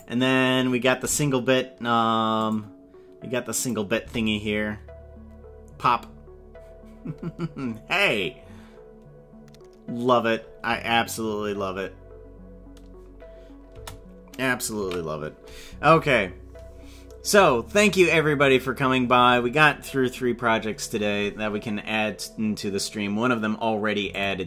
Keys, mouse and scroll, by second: 2.4 click, 3.6 click, 3.9 space, 13.8 space, 14.9 ctrl+s.